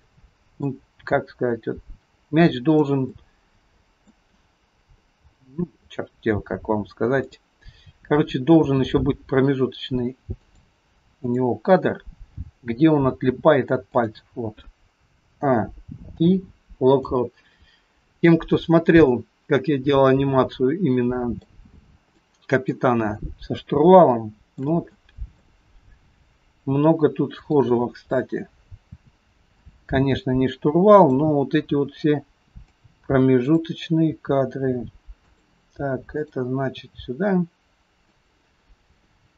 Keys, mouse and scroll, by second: 1.0 g, 3.1 middle click, 7.4 click, 8.8 r, 11.2 click, 12.4 g, 15.4 a, 16.3 i, 18.5-19.1 scroll down 1, 19.1 middle click, 21.7-23.0 scroll up 5, 22.2 middle click, 23.0-23.6 scroll up 1, 24.1 shift+middle click, 24.1-24.8 shift+scroll up 1, 25.0 middle click, 27.5 click, 28.9 r, 31.0 click, 31.9 r, 33.5 click, 34.3 r, 36.1 click, 36.9 r.